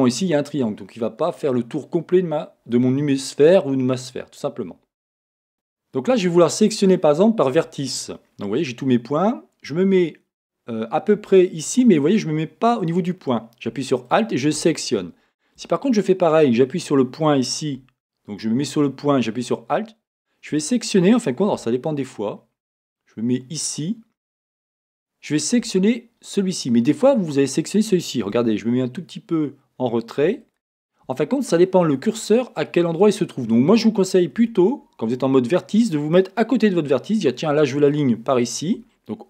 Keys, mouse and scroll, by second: 2.5-5.5 middle drag, 5.5 a, 14.1 alt+click, 15.6 a, 19.4 alt+click, 21.6 a, 21.9 scroll up 1, 24.8 alt+click, 28.4 a, 30.4 alt+click, 37.9 alt+click.